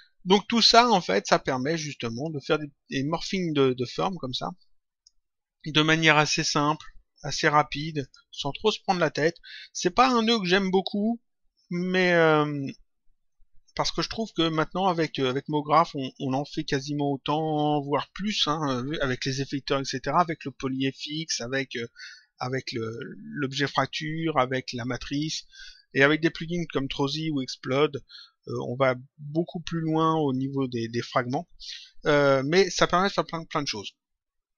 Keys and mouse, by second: 1.5 click, 2.8 click, 7.9 click, 9.0 click, 16.7 click.